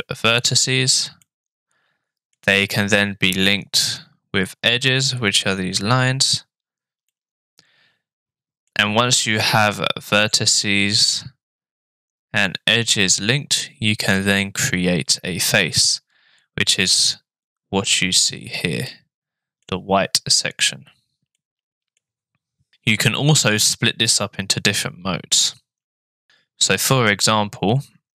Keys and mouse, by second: 1.2-2.3 middle drag, 7.1-8.7 middle drag, 18.9 middle click, 21.4 middle click.